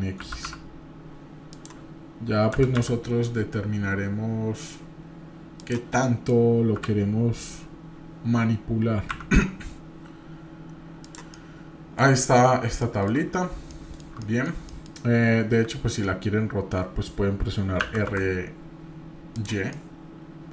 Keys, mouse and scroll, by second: 6.0 middle click, 6.8 g, 11.3-12.0 middle drag, 12.2 middle drag, 12.5-13.1 middle drag, 12.5 scroll up 2, 13.7 shift+middle click, 14.7 middle click, 19.7-20.5 middle drag.